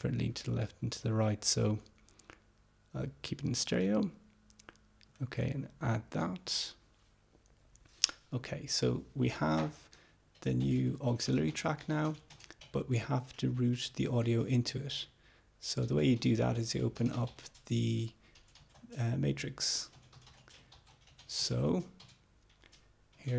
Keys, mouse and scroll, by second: 5.2 click.